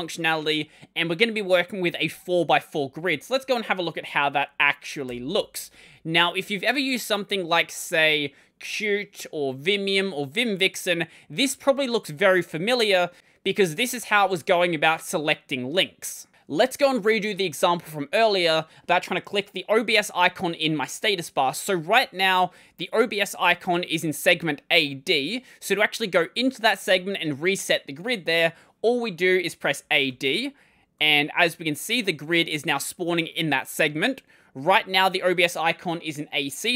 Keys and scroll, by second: 3.2 super+1, 4.9 ctrl+;, 29.7-31.1 typing.